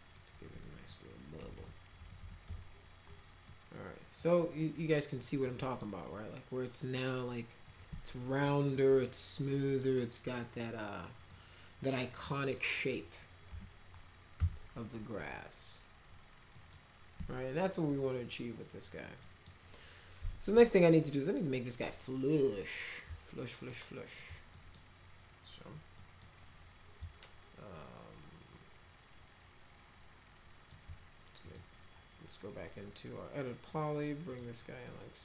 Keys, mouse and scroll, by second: 0.6 middle click, 1.4 F3, 1.6 F3, 2.0 F3, 2.2 F3, 2.4 F4, 3.5 middle click, 5.2 middle click, 5.6 middle click, 7.6 middle click, 8.7 middle click, 9.5 middle click, 11.3 middle click, 12.5 middle click, 13.5 p, 14.4 z, 16.6 right click, 19.2 right click, 23.1-24.2 alt+middle drag, 24.5 middle click, 26.0 middle click, 27.0-30.7 alt+middle drag, 31.5 click, 34.3 click.